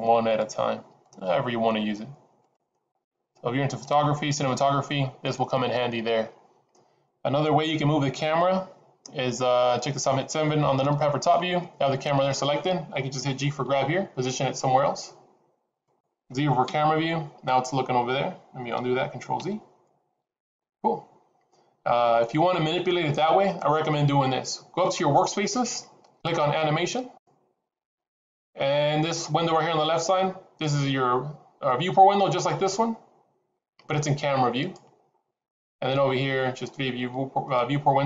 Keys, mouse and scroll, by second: 0.3 click, 1.0 click, 2.4 click, 2.9 click, 3.7 click, 10.8 KP_7, 12.0-12.8 scroll up 3, 13.6 g, 16.6 KP_0, 19.8 ctrl+z, 32.8 click, 32.8-33.2 scroll down 2.